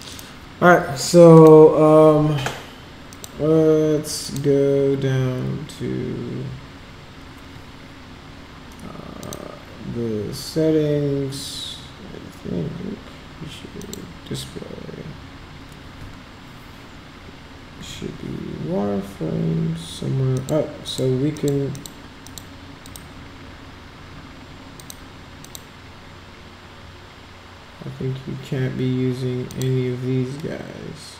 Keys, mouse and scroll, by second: 0.1 click, 1.3 click, 3.1 click, 4.2 click, 9.2 click, 13.8 click, 20.3 click, 20.8 click, 21.3 click, 21.7 click, 22.2 click, 22.8 click, 24.8 click, 25.4 click, 29.4 click.